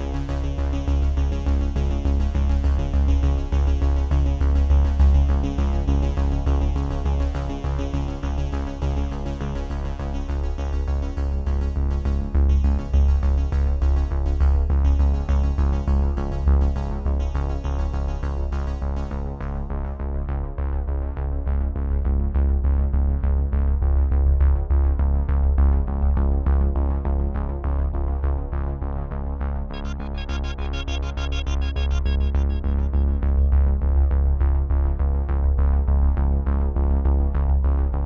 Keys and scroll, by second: 18.7 ctrl+F9, 35.3 ctrl+F9.